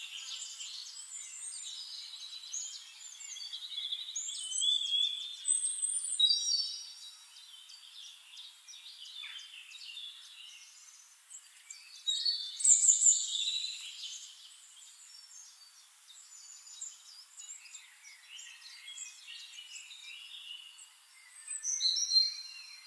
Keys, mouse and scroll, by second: 0.8 click, 3.0 ctrl+click, 3.8 ctrl+right click, 5.3 click, 6.4 click, 8.6 ctrl+d, 9.8-11.9 ctrl+drag, 12.4 ctrl+shift+click, 14.4-18.9 drag, 20.9 click.